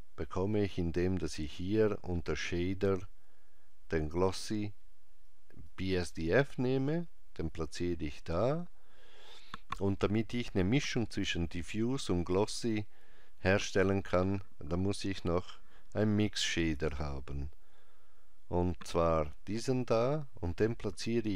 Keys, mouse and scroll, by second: 16.6 shift+a.